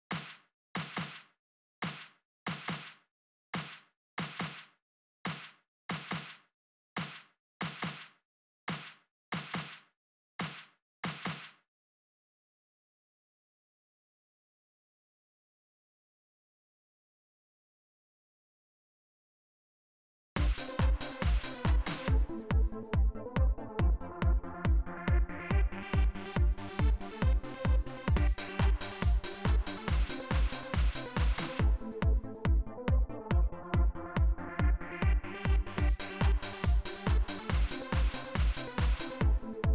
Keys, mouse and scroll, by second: 0.7 BackSpace, 2.0 click, 3.4 click, 4.4 Return, 6.7 click, 8.4-9.3 drag, 11.1 space, 14.0-16.2 drag, 18.1 click, 20.1 space, 24.2 click, 26.3 click, 27.9 click, 34.2 right click, 35.5 click.